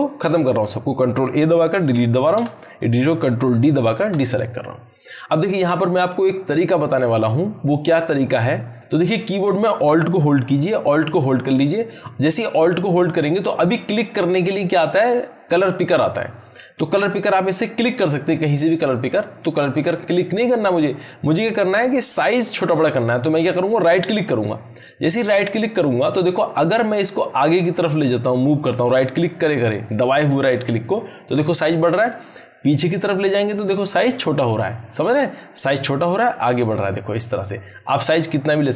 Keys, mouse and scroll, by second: 1.3 ctrl+Num_Lock, 1.5 ctrl+a, 4.0 ctrl+d, 10.7 alt+Num_Lock, 23.7-38.7 alt+right drag.